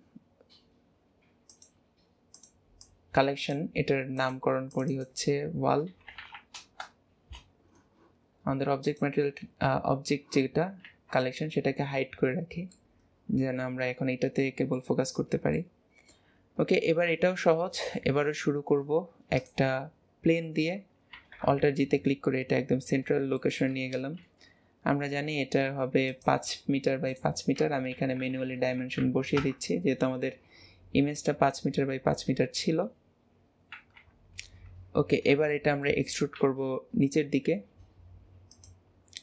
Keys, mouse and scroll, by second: 2.3 click, 2.8 click, 4.1 click, 4.7 click, 4.9-6.2 drag, 6.2 l, 8.8 click, 10.8 ctrl+s, 11.3-12.1 scroll up 2, 12.1-12.7 scroll down 1, 12.7-15.1 middle drag, 15.1 scroll up 1, 15.5-17.5 middle drag, 17.5 shift+a, 21.1 alt+g, 21.6 KP_7, 23.1 scroll down 1, 23.3-24.1 shift+middle drag, 24.1 s, 27.1-30.1 drag, 33.7 KP_1, 34.7 Tab, 35.0 scroll up 2, 35.5-36.3 shift+middle drag, 36.3 e.